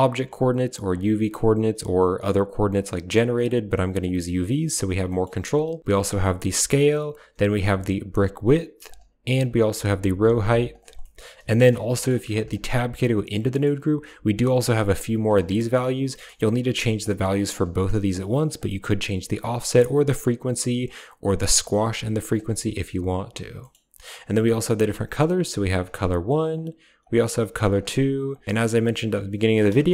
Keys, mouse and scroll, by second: 0.8-2.0 drag, 3.3-3.7 drag, 3.9 click, 4.9 middle click, 5.9 shift+click, 7.4-8.7 shift+drag, 9.2-10.6 shift+drag, 10.8 middle click, 11.8 middle click, 12.3 click, 12.5 Tab, 13.4 click, 13.4 middle click, 14.4 click, 16.0 click, 16.8 click, 18.4 click, 19.5 click, 19.6 click, 21.7 click, 22.7 Tab, 23.4 click, 24.3 click, 26.4 click, 28.1 click, 29.6 shift+a.